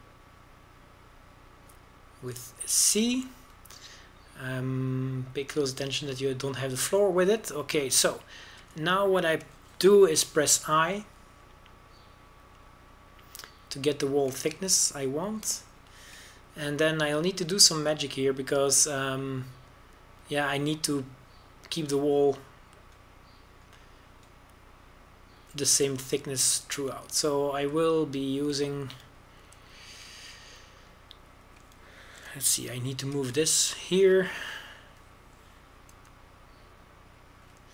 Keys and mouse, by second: 5.6-6.6 middle drag, 7.4 click, 7.9-9.4 middle drag, 9.4 click, 11.8 i, 16.6-17.6 middle drag, 17.6-21.5 middle drag, 23.7-28.7 drag, 34.0 g, 34.6-36.5 middle drag.